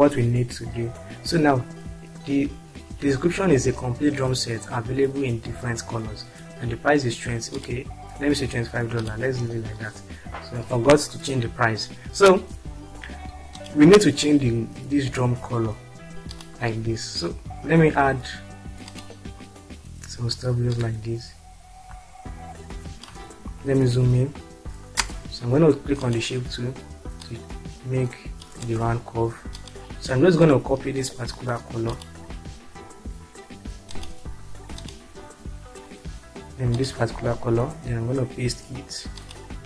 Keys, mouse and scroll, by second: 7.6 click, 9.2 click, 13.6 click, 21.0-23.1 drag, 24.9 space, 29.0 space, 31.9 click, 33.8 click, 39.2 click.